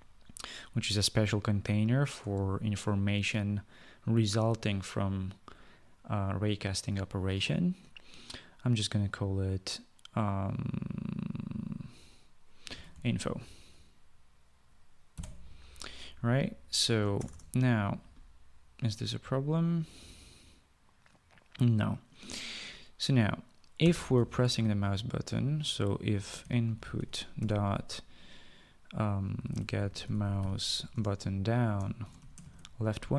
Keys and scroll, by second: 2.5 space, 12.8-13.8 typing, 15.5 ;, 17.5 Return, 17.6 Return, 24.1-24.7 typing, 26.5-28.2 typing, 29.5-32.8 typing.